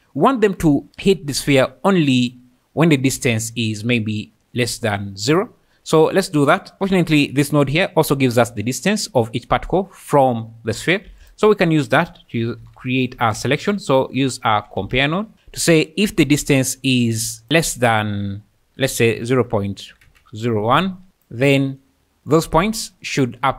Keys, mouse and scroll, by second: 6.4 click, 6.8 ctrl+s, 10.7 click, 11.1 shift+a, 14.3 BackSpace, 14.4 BackSpace, 17.2 click, 17.4 click, 18.0-20.0 drag, 21.1-21.8 drag.